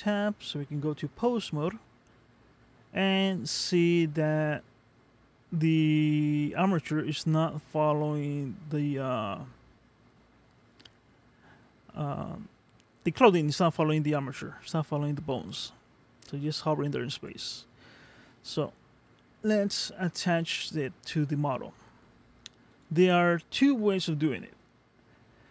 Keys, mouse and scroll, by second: 3.2 g, 19.4 ctrl+Tab, 20.1-20.6 scroll down 1, 20.6 middle click, 22.7 click, 23.5 middle click, 25.1-25.5 scroll up 1.